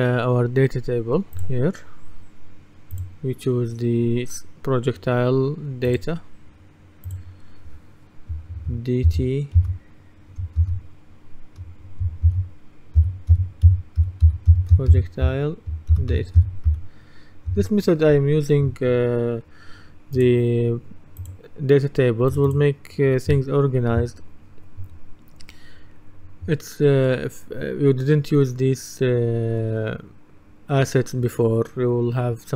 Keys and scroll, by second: 9.1 shift+d, 9.6 shift+t, 10.6 shift+-, 12.3-17.2 typing, 17.5 Return.